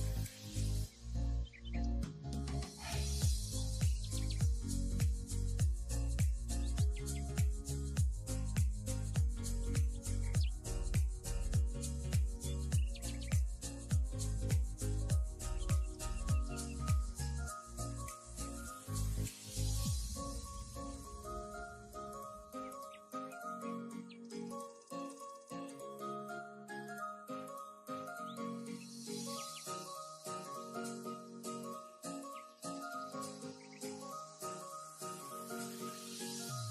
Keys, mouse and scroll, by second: 0.6 scroll up 2, 0.8 middle click, 1.6 1, 1.7 click, 1.9 shift+click, 2.1 j, 2.2-2.8 middle drag, 2.8 click, 3.3 j, 3.4-5.6 middle drag, 5.6 3, 5.8 click, 6.3 g, 8.5 middle click, 9.3 scroll down 4, 9.5 middle click, 10.0 scroll down 3, 10.2-11.2 middle drag, 11.2 alt+z, 12.6 alt+z, 13.3 click, 13.8 click, 14.2 middle click, 14.7 KP_3, 15.2-15.8 scroll up 5, 15.4 shift+middle click, 15.8 Tab, 15.9 click, 16.7 click, 17.1-18.0 middle drag, 18.0 click, 18.3 right click, 19.2 click, 19.4-20.8 middle drag, 20.8 scroll up 4, 21.0 middle drag, 21.2 Tab, 21.6 middle click, 22.5 click, 24.1 click, 24.3-25.9 middle drag, 26.1-26.6 scroll up 2, 26.6 shift+middle click, 27.4 k, 27.7-28.8 middle drag, 29.6 k, 30.9 k, 32.1-33.1 middle drag, 33.7 middle click, 34.7 scroll up 2, 34.9 shift+middle click, 35.4 k.